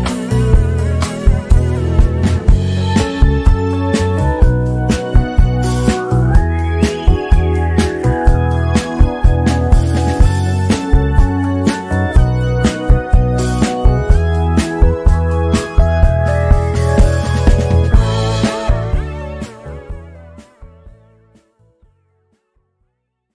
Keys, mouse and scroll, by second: 0.0 click, 0.3 shift+scroll down 1, 0.7 click, 1.1 shift+scroll down 1, 1.7-4.4 drag, 4.4 ctrl+g, 5.5-7.8 drag, 7.8 z, 8.3-11.5 drag, 11.5 z, 12.3-16.3 drag, 17.2 ctrl+shift+s, 18.1 ctrl+shift+s, 18.9-21.9 typing.